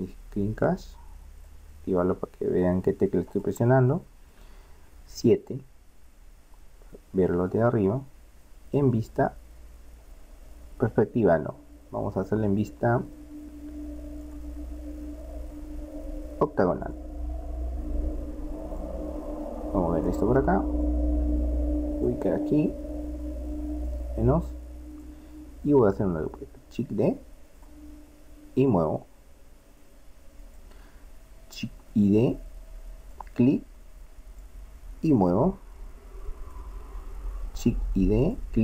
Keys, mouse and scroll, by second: 0.7-2.5 drag, 3.3 click, 3.9-5.1 middle drag, 5.4 KP_7, 7.1-9.7 middle drag, 18.7-20.6 drag, 20.9-22.5 drag, 23.9-26.2 drag, 27.0 shift+d, 31.7 shift+d, 34.4-36.1 drag, 37.6 shift+d.